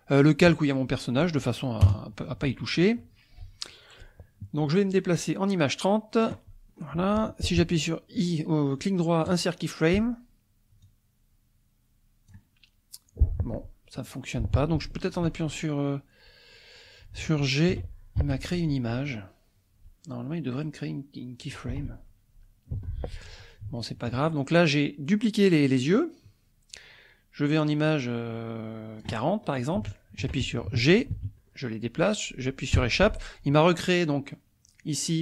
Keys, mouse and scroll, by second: 1.9 KP_0, 5.3-6.4 drag, 6.4 middle click, 6.8 scroll up 1, 8.3 right click, 9.3 click, 10.9-12.5 drag, 12.5-14.8 middle drag, 14.8 shift+middle click, 17.8 g, 18.2 Escape, 20.6 right click, 22.8 Escape, 23.8 shift+middle click, 25.9-29.2 drag, 29.8 shift+middle click, 31.1 g, 32.7 Escape.